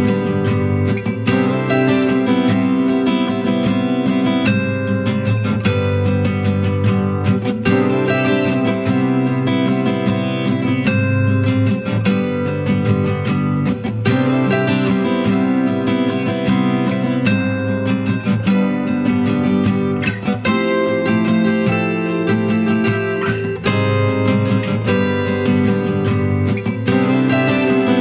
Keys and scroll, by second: 27.3 ctrl+j.